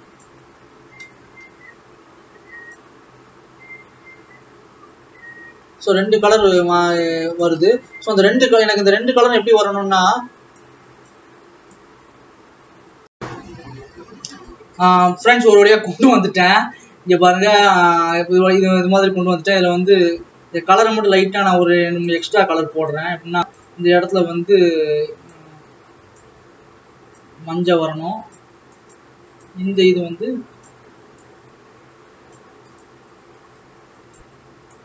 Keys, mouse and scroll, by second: 0.9 scroll down 2, 2.6 scroll up 2, 2.9-8.3 drag, 8.3 ctrl+s, 9.7-13.1 drag, 15.4-15.7 scroll up 6, 16.5-17.1 scroll down 2, 17.1-17.8 scroll down 2, 20.2-24.0 drag, 27.5-34.8 drag.